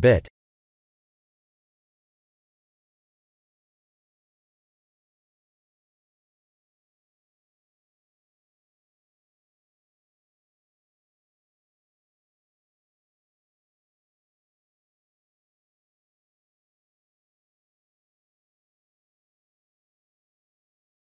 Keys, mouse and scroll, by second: 1.3 shift+click, 5.5 middle click, 6.5 KP_3, 7.0 shift+l, 9.9 click.